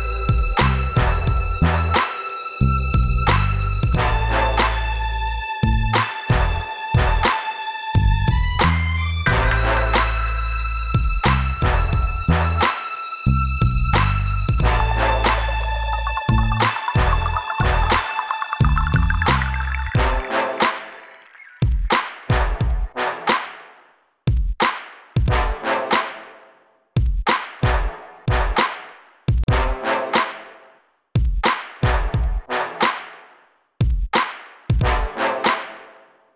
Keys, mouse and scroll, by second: 0.7 scroll up 2, 12.6-12.9 scroll down 3, 16.9 click, 17.5 click, 18.3 click, 19.2 scroll up 2, 20.0 right click, 21.1 click, 22.0 click, 22.9 click, 23.8 click, 25.1 click, 25.6 click, 25.7 double click, 26.3 double click, 26.3 double click, 26.7 scroll down 2, 27.9 click, 31.8 scroll up 2, 32.5 click, 34.1 scroll down 1.